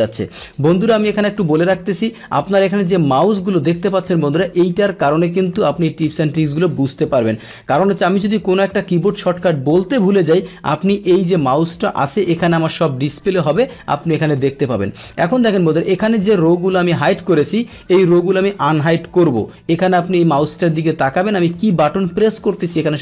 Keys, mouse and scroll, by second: 15.1 click, 15.8 click.